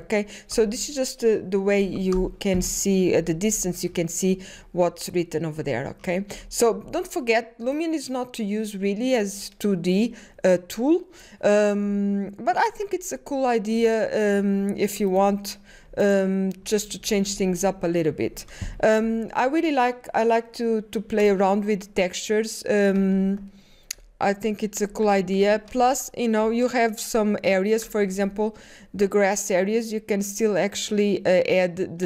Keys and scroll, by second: 0.0-0.9 typing, 2.6-3.4 typing, 6.8-9.8 typing, 17.2 space, 18.2 ctrl+o, 18.7-19.5 typing, 23.2 ctrl+o, 28.1 ctrl+o, 28.2 space.